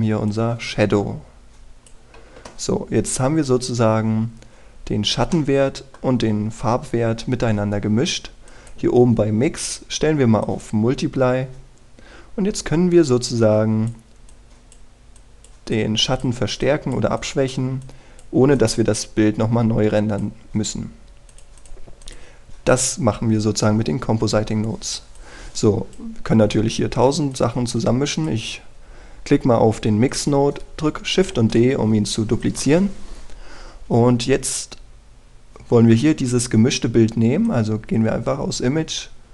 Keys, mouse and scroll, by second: 6.3 middle click, 9.4-22.0 drag, 27.2-28.3 scroll down 1, 28.3 click, 32.2 shift+d, 33.4-39.3 drag.